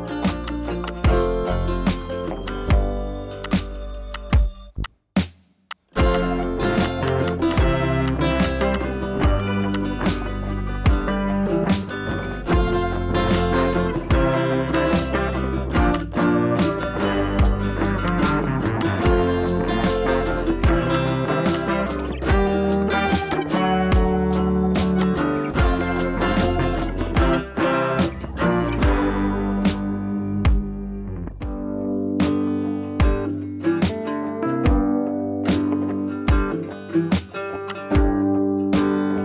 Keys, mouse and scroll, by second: 0.3 space, 0.4 click, 0.5 click, 0.6 space, 0.8-1.3 click, 1.8 ], 1.9 [, 2.4-2.9 drag, 9.4 [, 9.7-10.1 drag, 12.8 scroll down 1, 13.3-13.7 click, 13.6 space, 13.9 scroll up 1, 14.7-15.5 drag, 16.7 scroll down 1, 18.0-18.4 drag, 19.4 scroll down 1, 19.8 scroll up 1, 20.3 ], 20.4 ], 20.9-21.3 click, 22.0 scroll down 1, 22.5 scroll up 1, 23.3-23.9 click, 24.3 scroll down 1, 24.8 space, 25.0-25.6 click, 25.3 space, 26.4-28.2 drag, 36.8 ctrl+i, 37.4 scroll up 1, 37.6 space, 37.7-38.1 click, 37.9 space, 38.3 ].